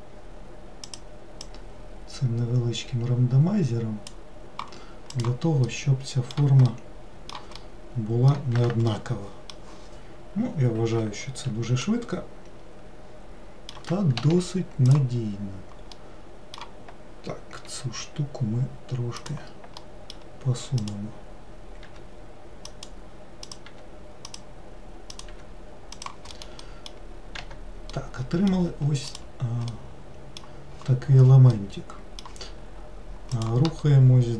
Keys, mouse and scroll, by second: 5.2 click, 5.8-14.3 middle drag, 14.3 1, 15.0 click, 16.1-17.8 middle drag, 17.8 g, 19.9-20.9 middle drag, 20.9 click, 22.0 g, 23.6 click, 23.8 g, 25.2 click, 25.4 g, 26.5-27.5 middle drag, 27.5 Tab, 28.1-29.2 middle drag, 29.2 click, 29.8-34.3 middle drag.